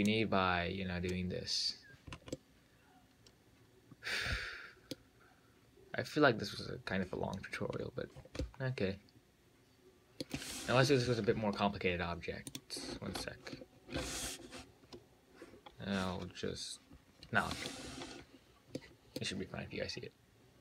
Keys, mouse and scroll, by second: 0.3 click, 2.3 scroll up 3, 2.6-5.6 middle drag, 8.1-8.4 scroll down 3, 8.4 scroll up 5, 8.7-11.7 middle drag, 12.7 click, 17.6-18.1 scroll down 1, 18.1-19.0 scroll down 7, 19.0-20.6 middle drag.